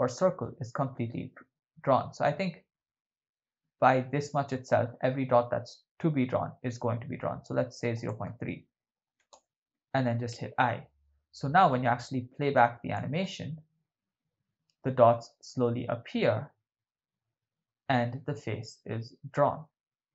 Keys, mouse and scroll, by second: 8.0-9.4 drag, 10.3 i, 11.4-13.0 drag, 13.3 shift+space.